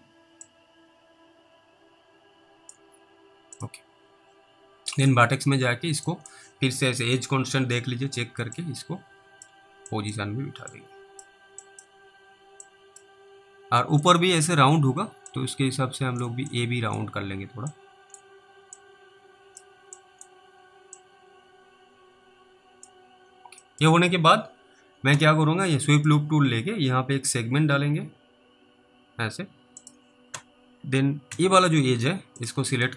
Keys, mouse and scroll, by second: 0.7 click, 3.6 click, 5.5 scroll up 1, 6.4 click, 8.8 click, 10.2 click, 11.0 click, 11.9 click, 12.9 click, 14.3 click, 15.6 click, 16.8 click, 18.0 click, 19.1 click, 20.3 click, 21.3 click, 23.2 scroll down 1, 23.9 middle click, 26.0 click, 29.8 click, 31.3 w, 32.4 click.